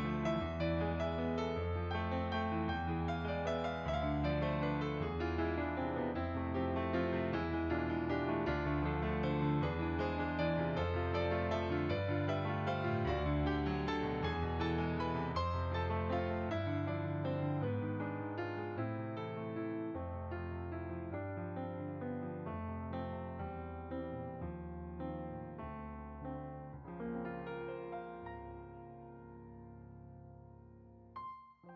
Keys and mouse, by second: 0.8 middle click, 1.6 click, 2.7 click, 9.1 click, 13.2 click, 13.8 click, 15.5 click, 17.4 middle click, 18.2 click, 21.4 f, 21.6 click, 23.4 shift+click, 23.6 middle click, 25.6 click, 27.5 f, 27.7 click, 28.1 f, 28.3 click, 31.3 middle click.